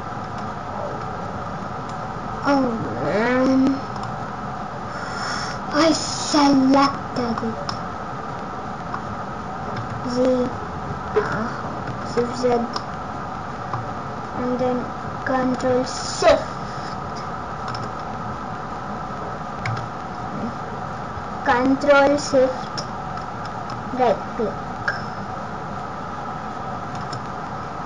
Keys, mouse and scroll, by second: 5.7 middle click, 7.6 middle click, 9.7 z, 12.0 shift+z, 12.7 middle click, 15.9 ctrl+shift+click, 19.6 a, 23.7 ctrl+shift+right click.